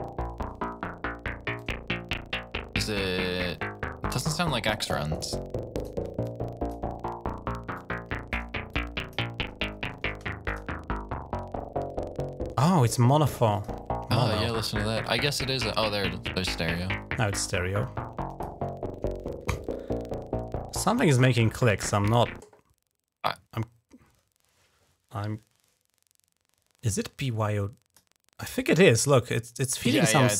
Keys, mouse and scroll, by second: 1.4-4.3 drag, 5.0 alt+right click, 5.6 alt+click, 6.1 click, 7.5 click, 8.5 click, 9.1 click, 10.3-11.8 drag, 13.4 click, 14.1 click, 15.0-16.9 drag, 17.2-18.4 drag, 20.8 click, 21.0 space, 26.9 click, 27.9 click.